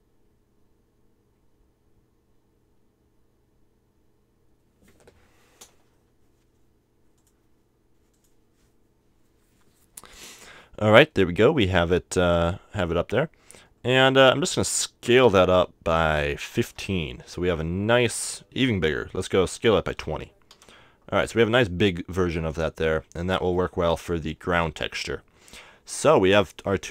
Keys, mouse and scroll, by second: 7.2-9.0 drag, 13.6-15.6 middle drag, 15.6 s, 20.3 s, 21.5-23.3 drag, 24.5 a.